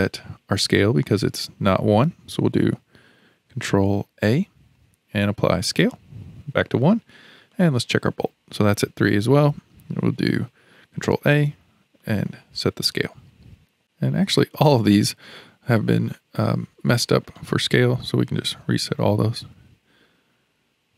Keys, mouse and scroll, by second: 4.1 ctrl+a, 7.5 click, 11.0 ctrl+a, 13.1-13.5 scroll up 5, 13.8 click, 15.5 scroll down 2, 16.1-18.4 shift+middle drag, 18.4 ctrl+a.